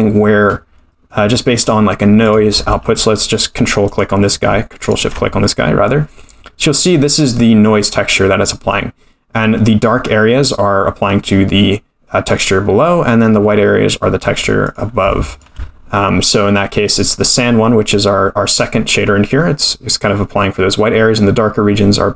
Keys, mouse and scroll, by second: 0.5-1.1 scroll up 4, 1.1 middle drag, 1.5 scroll down 1, 2.2 click, 3.8 ctrl+click, 4.8 ctrl+shift+click, 6.3-6.8 scroll down 3, 12.3 click, 14.6 click, 15.3 ctrl+shift+click.